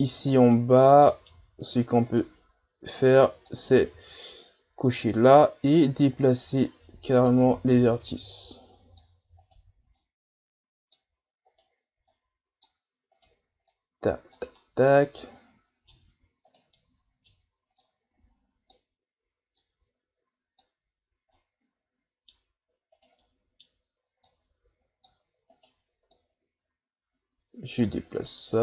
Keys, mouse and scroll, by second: 0.2-0.5 scroll up 3, 0.5 middle click, 1.4 Tab, 2.1 right click, 3.0 click, 3.8 ctrl+z, 5.0-7.6 drag, 7.6 ctrl+z, 8.2-9.4 drag, 9.4 right click, 10.0-11.5 drag, 11.5 right click, 12.1-13.1 drag, 13.1 right click, 13.7 click, 14.6-16.5 middle drag, 16.5 right click, 16.8-17.8 middle drag, 17.8-21.4 drag, 21.4-23.0 middle drag, 23.0 right click, 23.2-24.3 middle drag, 24.3-25.5 drag, 25.5 right click, 26.1-28.2 drag, 28.2 right click.